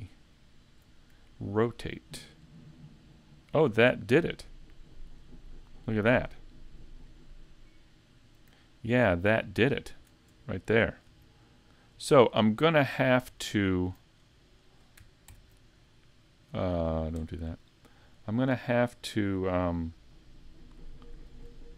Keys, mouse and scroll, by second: 7.0 click, 7.7 click.